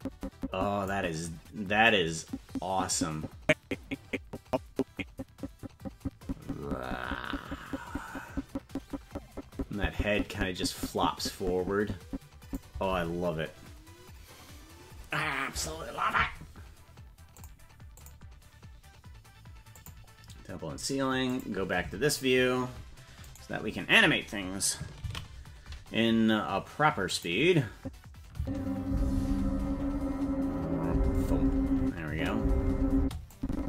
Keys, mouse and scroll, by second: 2.4-13.1 drag, 17.6 click, 18.4 click, 19.9 click, 21.3 click, 23.3 right click, 27.6 ctrl+s, 27.7 click, 28.3 space, 31.8 space, 32.0 space, 32.9 space, 33.3-33.6 drag.